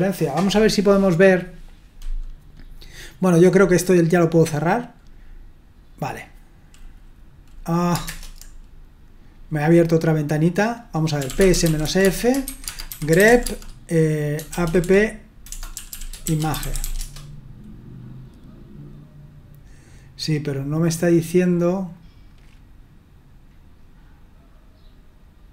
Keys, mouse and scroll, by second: 1.2 click, 4.8 click, 8.0 super+Return, 10.9-17.3 typing.